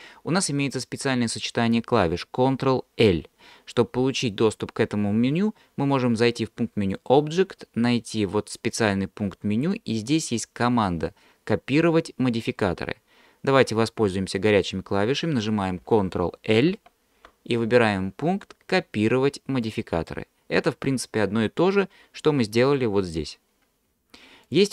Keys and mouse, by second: 7.0-13.0 drag, 16.7 ctrl+l, 22.7-24.0 drag.